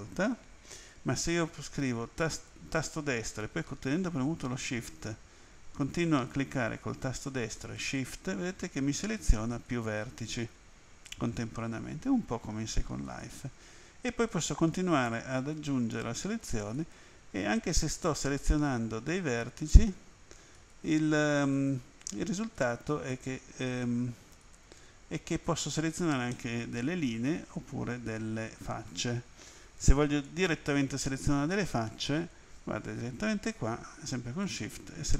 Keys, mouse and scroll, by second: 0.3 right click, 0.8 right click, 2.3 right click, 5.8 shift+right click, 7.8 shift+right click, 9.5 shift+right click, 13.1 shift+right click, 14.3 shift+right click, 16.8 shift+right click, 19.7 shift+right click, 21.6 shift+right click, 22.6 shift+right click, 24.4 shift+right click, 26.3 middle click, 30.3 click, 34.4 shift+right click.